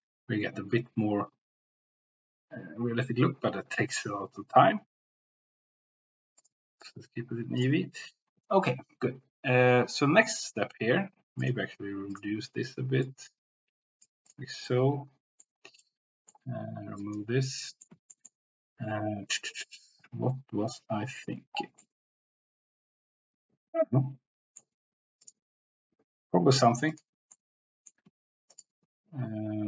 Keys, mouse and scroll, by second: 6.4-7.0 drag, 12.1 click, 14.3 drag, 14.8 middle click, 15.8 middle click, 17.1 click, 17.8 middle click, 18.1 shift+middle click, 21.8-24.6 middle drag, 25.2 click, 26.8 click, 27.3 middle click, 28.5 shift+click.